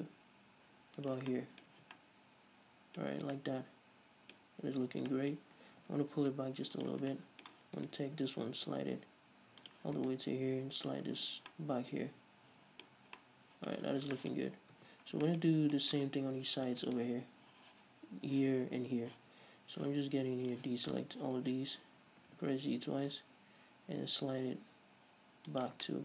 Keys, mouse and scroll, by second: 1.3 shift+click, 2.0 Tab, 3.3 scroll up 2, 5.0 Tab, 5.9 g, 7.1 shift+click, 7.4 shift+middle click, 8.0 right click, 8.4 g, 9.9 click, 10.2 right click, 10.5 g, 11.1 click, 11.3 Tab, 11.4 scroll down 1, 11.7-15.8 middle drag, 13.1-13.4 scroll up 1, 14.0 scroll up 1, 14.1 scroll down 1, 15.0 Tab, 15.2 scroll up 1, 15.7 scroll up 2, 16.0-16.6 middle drag, 16.6 ctrl+r, 17.2 click, 19.4 z, 20.7 ctrl+click, 21.3-21.7 scroll up 2, 21.7 z, 22.5 g, 25.9 shift+click.